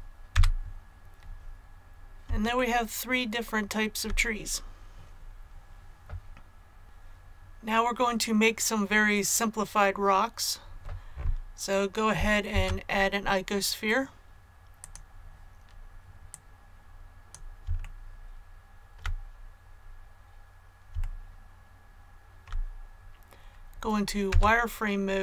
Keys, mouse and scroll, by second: 0.3 a, 1.2-1.6 scroll down 1, 2.5-4.6 shift+middle drag, 6.8 click, 12.4 shift+a, 14.9 click, 17.8 shift+middle click, 19.7 scroll up 1, 21.0 shift+middle click, 22.2 shift+middle click, 22.2 scroll up 2, 24.2 z.